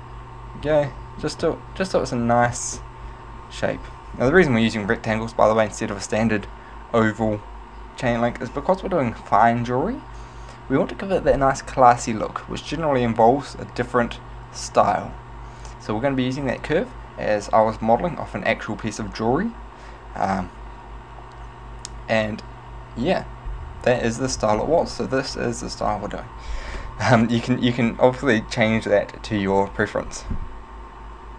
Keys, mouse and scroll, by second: 0.0 middle click, 0.7 z, 1.1 middle click, 1.6 middle click, 2.6 z, 2.8 middle click, 24.1 middle click.